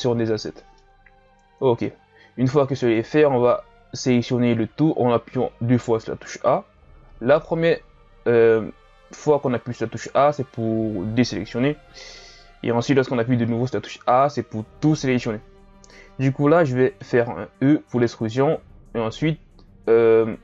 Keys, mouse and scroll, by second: 0.7 scroll up 1, 0.7-2.4 middle drag, 2.4-2.7 scroll down 2, 2.7-4.1 middle drag, 4.1 a, 4.6 a, 16.6-17.6 middle drag, 17.6 e.